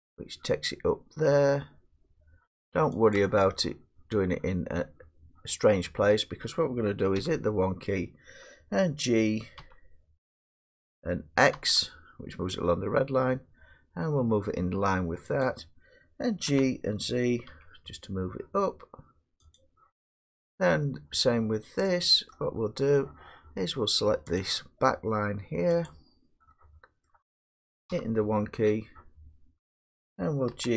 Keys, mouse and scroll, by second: 0.5-4.8 drag, 4.8-7.4 middle drag, 7.2 1, 9.6 g, 11.6 x, 15.4 click, 16.5 g, 17.5 z, 19.6 click, 20.5-22.1 drag, 22.3 middle click, 23.0 middle click, 24.4 click, 25.9 click, 27.5 middle click, 27.9 1, 30.5 g.